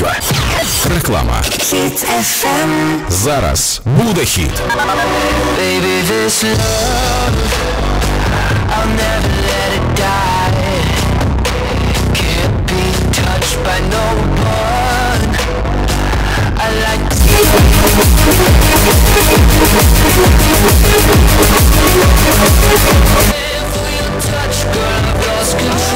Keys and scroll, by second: 23.9 Page_Down.